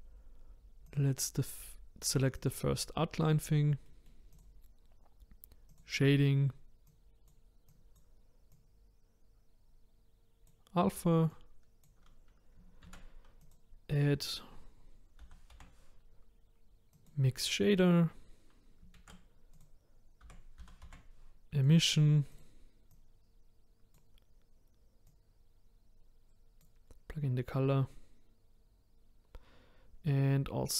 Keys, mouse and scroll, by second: 3.9 middle click, 4.4 click, 5.8 click, 26.6 click.